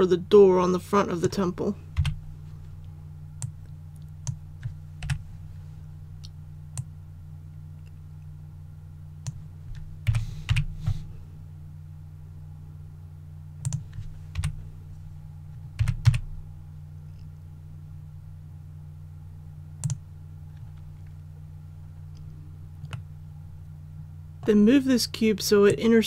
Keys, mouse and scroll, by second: 1.9 KP_1, 3.4-4.9 drag, 5.0 KP_3, 6.7-9.9 drag, 10.0 s, 10.4 y, 13.6 click, 14.3 KP_1, 15.7 s, 16.0 x, 19.8 click, 22.9-24.9 middle drag, 25.6-26.0 drag.